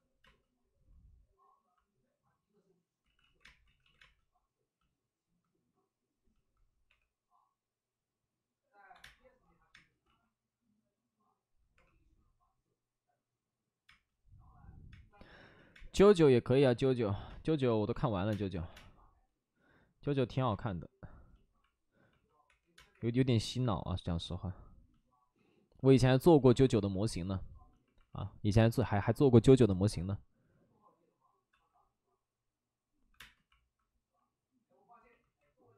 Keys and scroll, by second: 0.2 space, 3.1 ctrl+z, 3.3 ctrl+z, 3.6 ctrl+z, 3.6 space, 3.9 ctrl+z, 3.9 space, 6.8 3, 8.9 1, 9.5 space, 10.0 ctrl+z, 11.7 3, 13.8 space, 14.9 space, 15.5 ctrl+z, 15.7 space, 17.2 space, 18.5 3, 18.6 space, 18.6 3, 20.4 1, 22.4 3, 22.7 space, 28.5 space, 28.6 space, 28.9 space, 29.4 space, 31.5 ctrl+z, 33.0 1, 33.1 space.